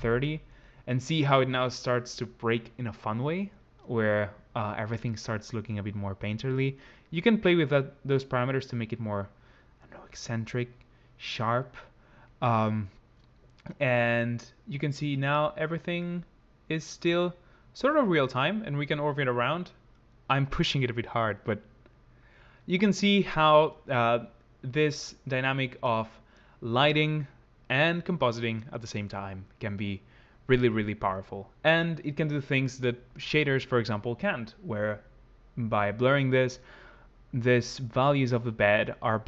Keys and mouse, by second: 7.1 click, 9.4 click, 11.7 click, 14.8 click, 16.3 click, 18.1 middle click.